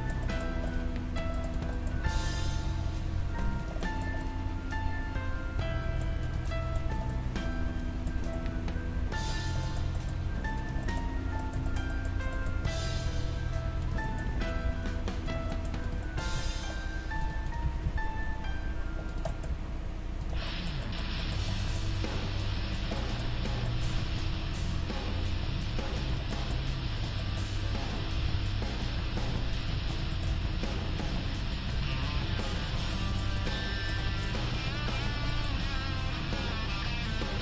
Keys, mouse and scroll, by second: 0.1 right click, 1.9-3.2 right drag, 1.9 g, 3.2-6.0 middle drag, 6.3-8.1 right drag, 6.6-15.4 middle drag, 10.6-12.3 right drag, 13.8-15.4 right drag, 14.3 g, 15.6 middle click, 16.3 g, 17.5 middle click, 17.5-19.1 right drag, 17.6 g, 19.3-22.1 middle drag, 19.5 g, 22.1 right click, 22.7 middle click, 23.9 g, 24.6 middle click, 26.5 middle click, 27.0 click, 27.0-33.1 right drag, 28.2 g, 30.1-32.1 drag, 30.3 g, 32.1 g, 32.9 click, 35.5 g, 35.6-36.8 drag, 35.6-37.3 middle drag.